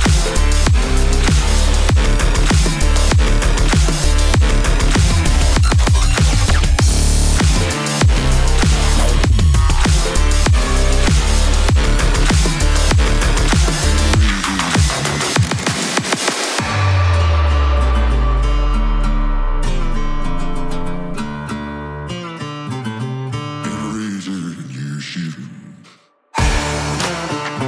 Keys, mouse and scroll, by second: 1.3 click, 1.9-2.8 typing, 9.8 click, 10.0-18.8 drag, 19.3-21.8 drag, 20.6 typing, 22.8 Return, 24.0 click, 26.3-27.1 typing, 26.6 click.